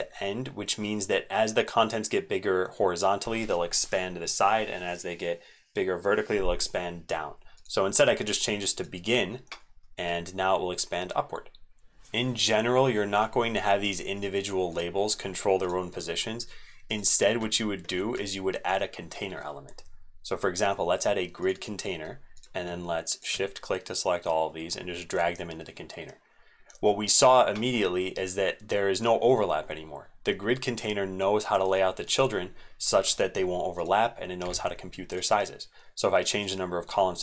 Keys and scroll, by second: 11.9 ctrl+z, 17.9 ctrl+a.